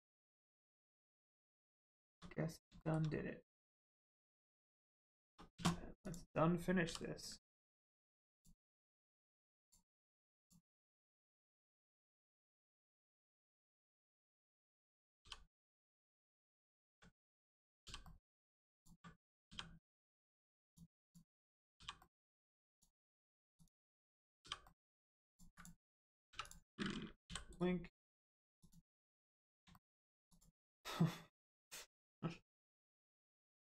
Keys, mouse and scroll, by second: 1.6 click, 1.9 shift+middle click, 2.3 scroll up 1, 2.7 shift+middle click, 3.0 scroll up 1, 4.1 shift+middle click, 4.3-4.8 scroll up 1, 5.1 shift+middle click, 6.0 click, 6.8 g, 7.4 middle click, 8.3 ctrl+click, 8.9 click, 15.1 g, 15.8 middle click, 17.1 right click, 18.0 middle click, 18.7 ctrl+click, 19.4 g, 19.9 middle click, 20.6 ctrl+click, 21.0 click, 21.7 g, 21.9 middle click, 22.7 ctrl+click, 23.5 click, 24.3 g, 24.4 click, 24.6 middle click, 24.7 click, 25.9 ctrl+scroll down 2, 27.2 l, 27.5 right click, 28.5 click, 29.1 scroll down 1, 29.7 shift+middle click, 30.2 click.